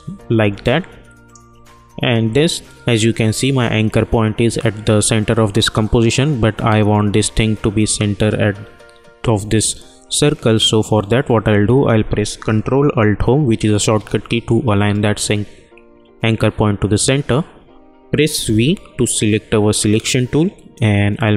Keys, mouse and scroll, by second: 13.7 ctrl+alt+Home, 18.4 v, 20.7 click.